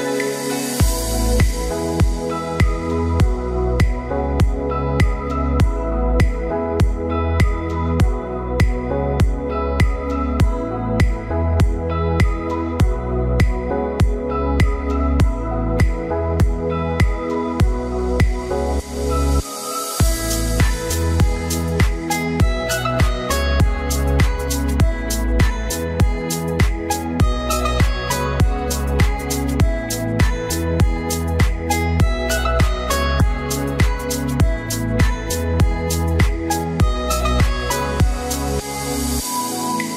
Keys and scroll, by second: 4.3 ctrl+t.